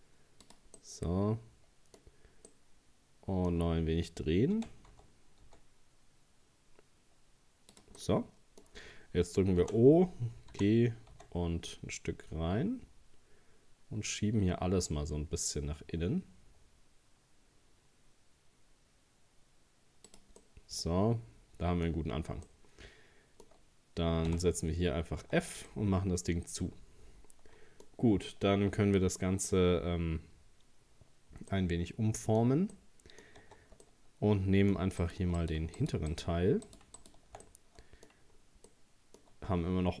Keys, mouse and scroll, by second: 0.8-2.1 middle drag, 2.1-2.5 scroll up 1, 2.5-4.6 middle drag, 4.6 r, 8.0-9.6 middle drag, 9.6 o, 10.5 g, 20.4-22.1 middle drag, 22.1-22.5 scroll down 1, 22.5-23.6 middle drag, 23.6-23.9 scroll up 1, 24.3 f, 25.2 Tab, 25.7-28.6 middle drag, 28.6 scroll down 1, 31.5-33.4 middle drag, 33.4 Tab, 33.8 scroll up 1, 33.8-35.0 middle drag, 35.0 right click, 35.4 shift+right click, 35.8 shift+right click, 36.1 shift+right click, 36.7 shift+right click, 37.0 shift+right click, 37.5 middle click, 38.3-38.7 scroll down 2, 38.7-40.0 middle drag.